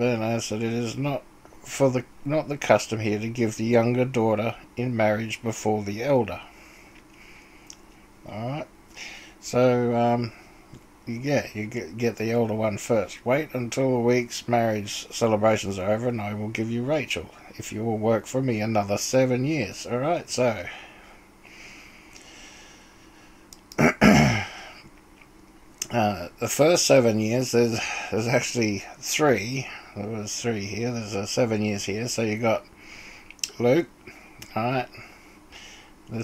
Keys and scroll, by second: 23.5-24.2 typing.